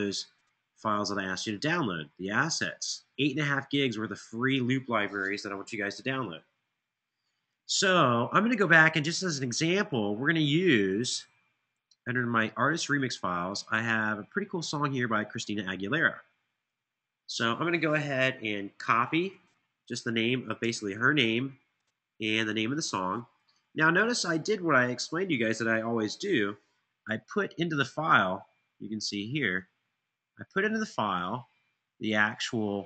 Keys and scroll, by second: 18.5 Return, 19.8 Left, 20.4 shift+Right, 21.0 Tab, 21.2 Tab, 25.8 super+c.